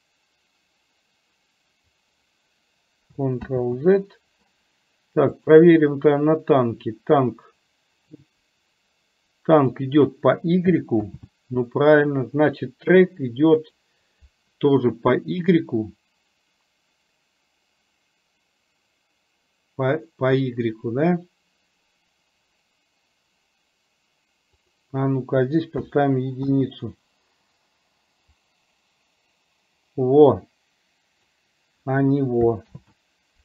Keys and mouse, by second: 3.6 ctrl+z, 8.4-9.8 drag, 13.6 click, 24.9-26.6 drag, 28.3 click, 28.7-31.3 drag, 32.7 ctrl+z.